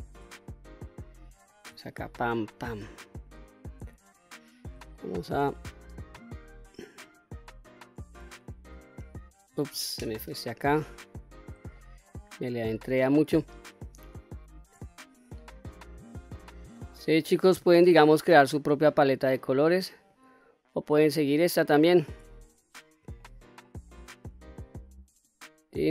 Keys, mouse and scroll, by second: 0.2-1.3 middle drag, 1.9 shift+click, 2.4 shift+click, 3.1 shift+click, 4.0 shift+click, 4.8 middle click, 6.2 shift+click, 8.4 shift+click, 9.9 ctrl+z, 10.4-10.9 scroll up 2, 10.9 scroll down 1, 11.6 shift+middle click, 13.1 shift+click, 14.1 shift+click, 14.7-15.2 scroll down 2, 15.2-15.9 middle drag, 16.4 shift+click, 17.0 shift+click, 17.5 shift+click, 18.5 shift+click, 19.9 shift+click, 21.7 shift+click, 22.2-22.9 scroll up 1, 23.0-23.4 shift+middle drag, 23.7-24.1 scroll up 1, 24.9 shift+click, 25.8-25.9 scroll down 2.